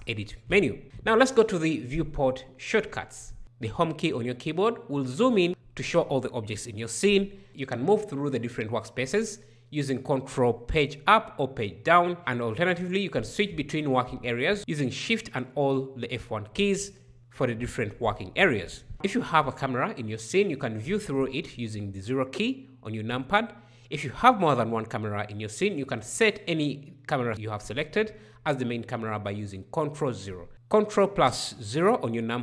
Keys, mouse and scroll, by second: 3.4 Home, 3.9-4.8 scroll up 5, 4.8 scroll up 1, 4.9 Home, 5.7-6.7 scroll up 6, 6.9-7.4 scroll down 5, 10.6 ctrl+Page_Up, 10.8 ctrl+Page_Up, 12.0 ctrl+Page_Up, 12.1 ctrl+Page_Up, 12.2 shift+F1, 18.9 KP_0, 25.2 ctrl+KP_0.